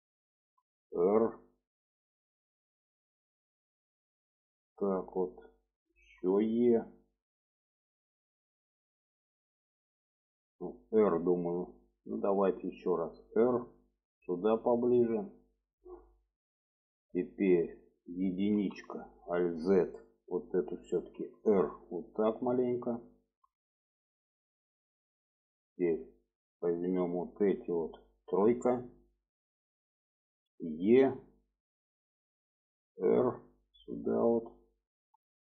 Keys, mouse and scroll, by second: 0.5 r, 2.9-5.5 drag, 6.2 e, 12.2 r, 13.9-15.7 drag, 16.3 shift+middle click, 18.7 1, 19.0 click, 19.5 alt+z, 20.1 click, 21.3 r, 22.8-24.7 drag, 26.5-27.6 drag, 28.4 3, 30.6 e, 32.6 r, 34.3-35.5 drag.